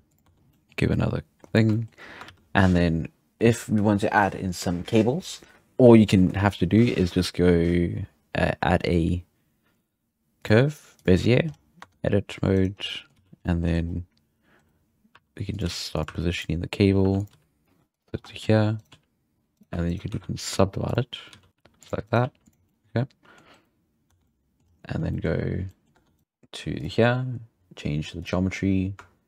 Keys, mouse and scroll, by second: 0.2 Tab, 0.4 middle click, 0.4 scroll down 1, 0.6 middle click, 0.7-1.4 scroll up 1, 1.4-1.7 scroll down 1, 1.7 shift+middle drag, 2.0 scroll down 4, 2.2 shift+a, 8.6-9.4 scroll down 1, 9.4-10.4 scroll down 1, 11.5 scroll down 3, 12.0 Tab, 12.6 right click, 12.8 scroll down 1, 12.9-13.2 middle drag, 13.2 z, 13.4 scroll up 1, 13.4-13.9 middle drag, 15.2-17.3 typing, 18.2 scroll down 1, 18.2 shift+middle click, 18.8 right click, 18.9 g, 19.3 scroll up 2, 19.6-20.1 right drag, 20.1 w, 21.3 z, 21.5 right click, 21.6 g, 22.1 right click, 22.2 g, 22.6-23.7 middle drag, 24.1 Tab, 24.2-24.6 middle drag, 24.6-25.1 scroll up 3, 25.1-25.9 middle drag, 25.9 Tab, 26.2 right click, 26.2 g, 26.8 click, 28.2-28.5 drag, 28.5-29.2 scroll down 1.